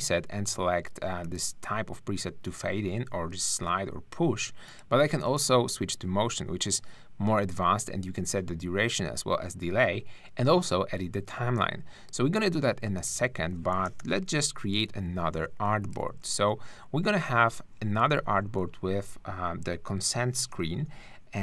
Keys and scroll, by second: 14.0 super+-, 16.2 super+d, 20.8 super+=.